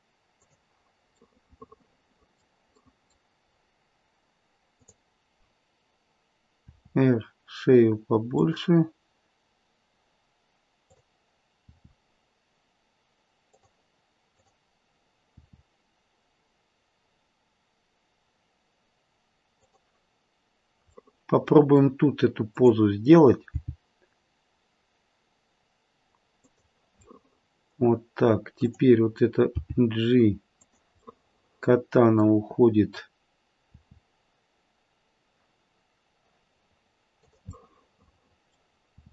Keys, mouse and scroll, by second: 1.2 middle click, 2.8 middle click, 3.5-4.7 scroll up 1, 4.7 click, 4.7-5.8 scroll up 1, 6.6 r, 10.8 click, 11.6 r, 14.3 click, 15.2 r, 20.9 middle click, 21.2 middle click, 21.6 middle click, 22.4 middle click, 22.4 click, 23.5 g, 27.0 middle click, 27.6 middle click, 28.6 click, 29.4 g, 31.0 middle click, 33.7 r, 37.6 middle click, 37.7 middle click, 39.0 r.